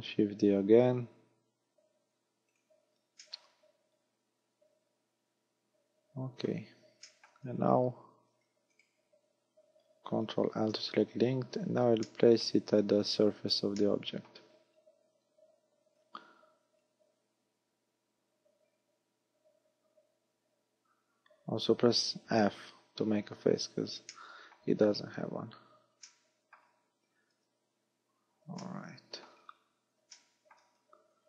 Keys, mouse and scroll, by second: 2.6 click, 3.2 middle click, 7.1 shift+middle click, 7.5 z, 8.4 z, 8.8 right click, 10.6 ctrl+l, 11.4-12.1 scroll up 2, 12.1 shift+middle click, 12.8 scroll up 1, 13.8 middle click, 15.9 z, 16.8 click, 23.0 f, 23.4-23.8 scroll up 4, 24.2 shift+middle click, 25.0 scroll up 1, 26.0 middle click, 27.4 KP_3, 28.6 shift+middle click, 29.4-30.2 scroll down 6, 30.2 shift+middle click, 30.8-31.2 scroll up 7.